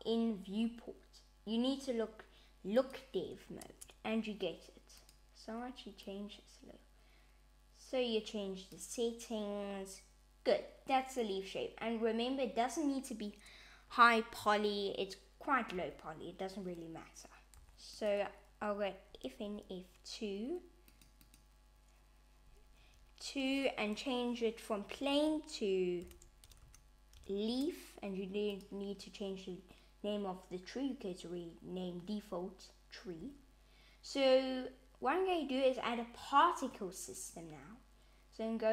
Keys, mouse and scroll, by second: 2.8 click, 3.6 Tab, 5.0 click, 15.8 /, 17.6 g, 19.4 F2, 21.2 click, 22.7 F2, 28.5 click, 37.2 click.